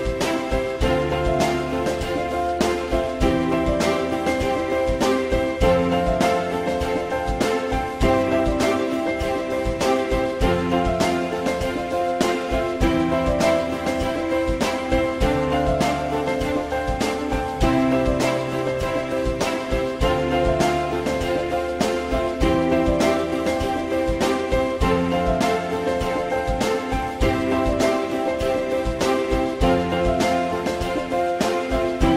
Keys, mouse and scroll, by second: 3.3 alt+middle click, 6.4 2, 7.8 shift+click, 8.7 ctrl+BackSpace, 9.9 alt+middle click, 13.2 shift+click, 14.3 ctrl+shift+e, 15.2 alt+middle click, 18.5 ctrl+z, 19.2 alt+middle click, 31.5 shift+click.